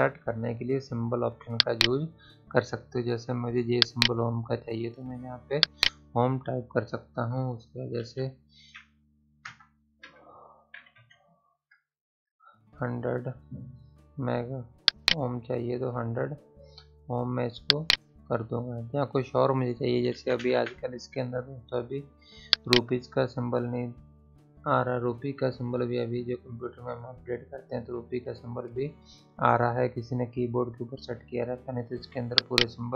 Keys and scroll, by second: 8.0-10.7 typing.